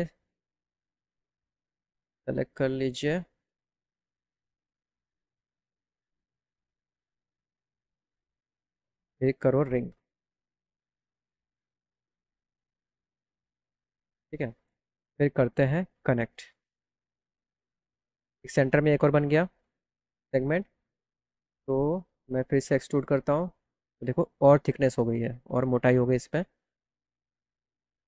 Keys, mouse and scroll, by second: 0.2 ctrl+click, 1.2 ctrl+click, 1.6 click, 2.6 click, 4.5 ctrl+click, 5.3 ctrl+click, 6.6 ctrl+click, 7.2 ctrl+click, 7.9 ctrl+click, 9.2 click, 10.5 right click, 14.6 right click, 16.1 click, 19.3 click, 21.2 click, 22.4 click, 23.0-23.4 scroll down 1, 24.2 click.